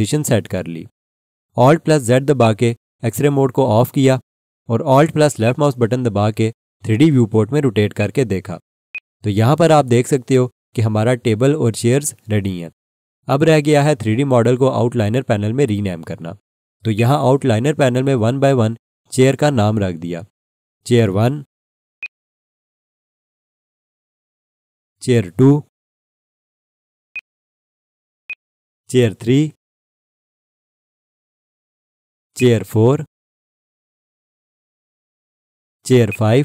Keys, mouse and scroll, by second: 0.0-0.6 typing, 2.4 click, 3.2 alt+z, 5.4 alt+click, 8.0 alt+shift+click, 8.9 alt+click, 16.9 click, 22.0 click, 23.7 F2, 24.1-26.0 typing, 27.1 click, 29.1 F2, 29.5-31.3 typing, 32.3 click, 33.2 F2, 33.4-35.1 typing, 36.1 click.